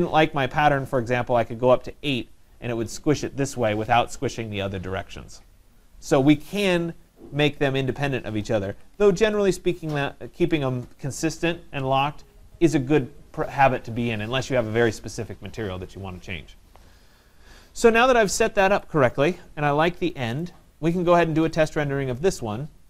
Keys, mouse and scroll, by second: 1.2 8, 1.7 Return, 7.8 click, 8.5-9.9 typing, 10.5 click, 20.4 right click, 21.7 click.